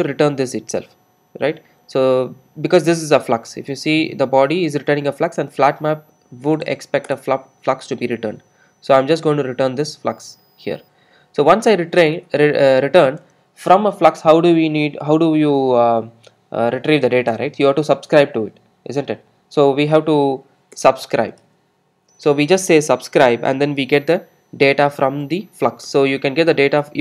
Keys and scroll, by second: 7.1 Return, 17.1 alt+Return, 25.9 Return.